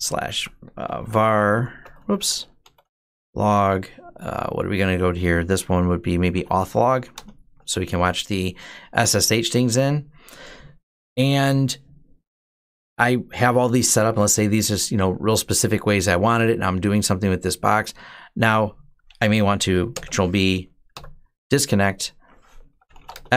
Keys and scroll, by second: 0.0-3.3 typing, 2.0 Tab, 5.8-6.7 typing, 7.0 Return, 19.8 ctrl+b, 20.8 d, 22.3-23.3 typing.